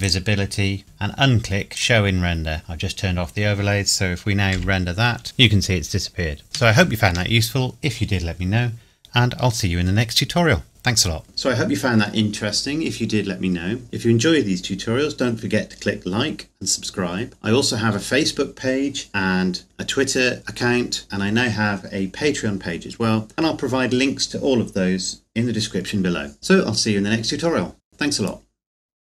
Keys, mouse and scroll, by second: 0.0 click, 1.8 click, 4.5 F12.